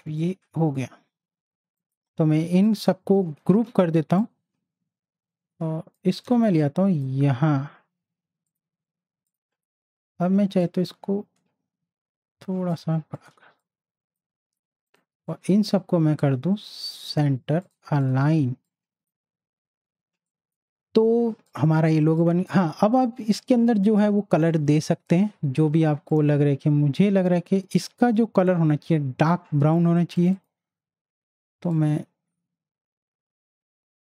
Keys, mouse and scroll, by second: 0.2-1.8 drag, 3.5 ctrl+g, 4.2-6.1 drag, 6.2 z, 6.6-8.4 drag, 10.6-13.1 alt+shift+drag, 13.1 click, 13.3 z, 13.6 click, 18.3 z, 18.6-22.1 drag, 22.1 space, 22.2 click, 26.1 click, 30.1 click, 30.2-34.0 drag.